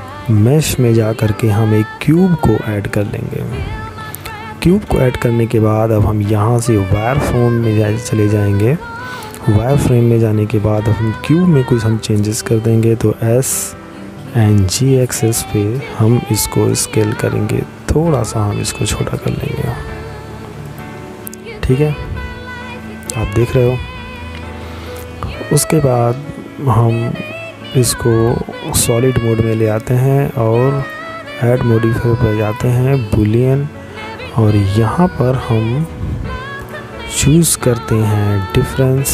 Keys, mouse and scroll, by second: 3.9 click, 19.7 middle click, 25.9 click, 34.2 click, 37.5 click.